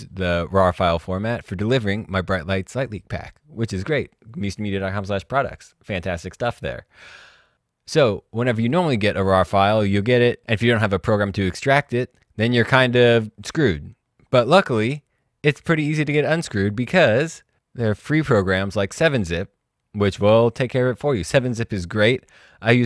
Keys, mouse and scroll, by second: 13.3 click, 16.0 click, 17.2 click, 21.5 click.